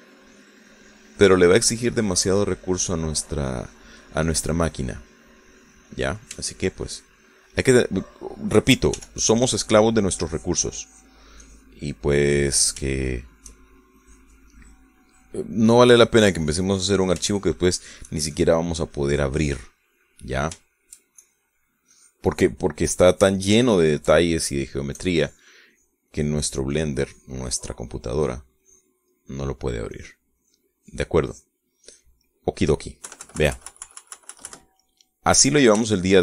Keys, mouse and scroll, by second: 5.1 click, 5.1-7.3 middle drag, 7.4 shift+middle click, 8.1 shift+middle click, 8.9 shift+middle click, 10.0 f, 10.3 click, 10.7 click, 11.3 click, 12.5 click, 13.0 middle click, 14.0 shift+middle click, 15.1 click, 16.1 click, 16.6 click, 17.1 click, 18.3 shift+middle click, 19.4 shift+click, 19.8 shift+click, 20.4 click, 20.8 middle click, 21.7 shift+middle click, 22.3 shift+click, 23.0 click, 23.9 click, 24.7-25.8 shift+middle drag, 26.0-29.1 shift+drag, 29.2 click, 30.2 middle click, 31.0 click, 32.4 click, 32.9 click, 33.3 middle click, 34.1 KP_Subtract, 35.9-36.2 drag.